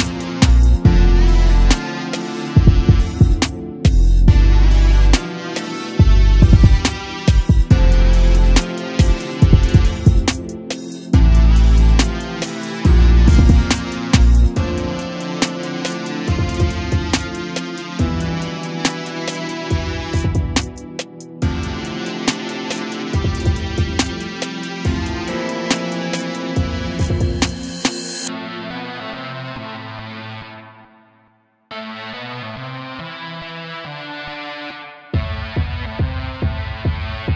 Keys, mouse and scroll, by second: 0.3 a, 0.5 a, 1.6-3.6 middle drag, 3.6 click, 5.7 a, 5.9 a, 8.0 scroll up 1, 10.1-13.1 middle drag, 15.1 click, 15.6-16.8 middle drag, 16.8-19.8 drag, 20.0 click, 27.5-30.6 drag, 30.7 a, 30.9 a, 31.8-34.9 shift+middle drag, 35.6-36.8 middle drag, 36.8-37.3 drag.